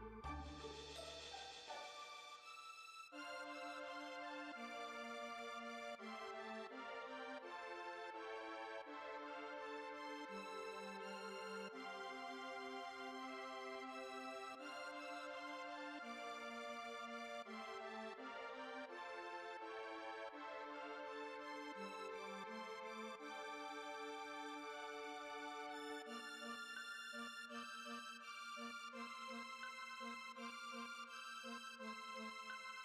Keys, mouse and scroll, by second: 2.9 h, 4.2-4.9 middle drag, 4.9 click, 5.4 KP_7, 8.5 click, 9.9 middle click, 11.1-14.3 middle drag, 14.3 click, 15.6-17.4 middle drag, 17.4-19.8 drag, 32.6 click.